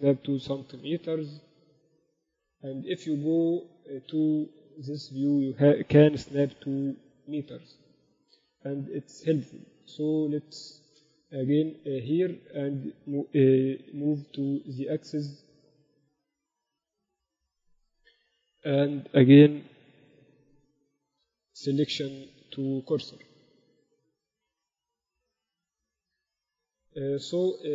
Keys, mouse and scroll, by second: 0.3 g, 2.8 middle click, 6.1 g, 10.7-14.7 middle drag, 13.3 g, 17.0-18.7 drag, 20.1 shift+c, 21.2 shift+s, 24.3 g.